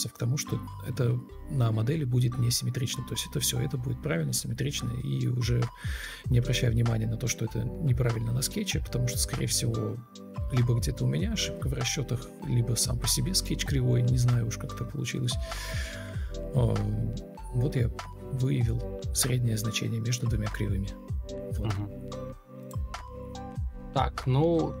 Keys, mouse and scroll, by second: 23.0 Delete, 23.0 ctrl+v, 24.1 Escape, 24.3 Delete.